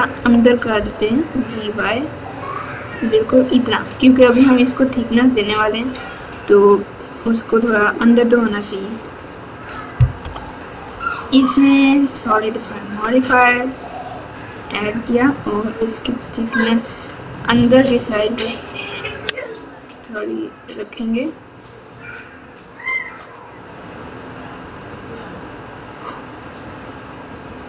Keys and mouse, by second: 0.1 g, 4.1 click, 7.7 click, 9.2-13.7 drag, 15.7-21.5 drag, 22.6 click, 22.9 click, 24.9 click, 27.2 click.